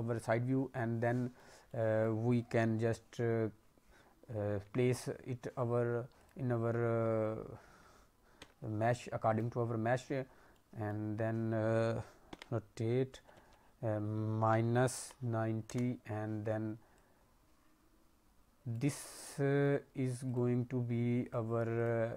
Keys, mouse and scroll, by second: 1.1 middle click, 1.5 scroll up 1, 1.6 middle click, 4.4 s, 6.9 scroll down 2, 7.3 scroll up 1, 8.3 s, 9.9-10.4 scroll up 2, 10.4 middle click, 12.2 r, 16.9 click, 19.0-19.4 scroll up 3, 19.2 middle click, 20.2 click, 21.7 click.